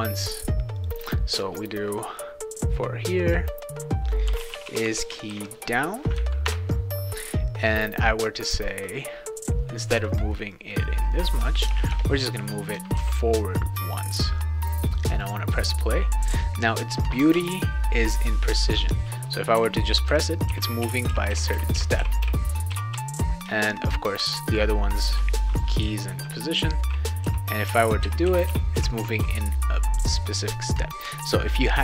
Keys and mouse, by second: 0.8 click, 0.9 click, 4.0-5.8 typing, 6.4 Return, 8.7 click, 10.5-11.6 drag, 11.6 BackSpace, 11.9 BackSpace, 13.0 ctrl+s, 13.7 click, 15.2 click, 19.6-23.4 typing, 25.1-29.2 typing.